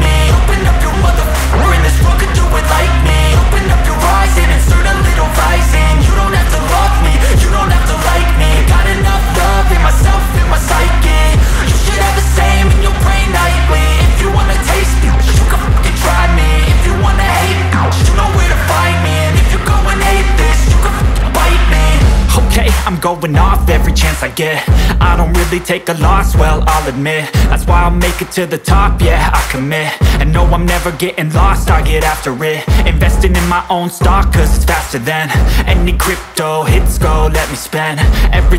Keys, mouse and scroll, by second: 0.1 scroll down 1, 0.7-1.0 scroll up 1, 1.0 space, 1.8-2.8 scroll up 1, 2.8 click, 3.4-4.9 scroll down 1, 4.9-7.2 drag, 7.8 space, 10.2-13.9 drag, 14.8 space, 15.8-19.3 drag, 20.0 space, 21.0-23.7 drag, 24.2-24.6 scroll down 1, 24.6 scroll up 1, 25.0 space, 26.1-28.8 drag, 29.4 space, 31.2-33.9 drag, 34.5 space, 36.6-38.5 drag.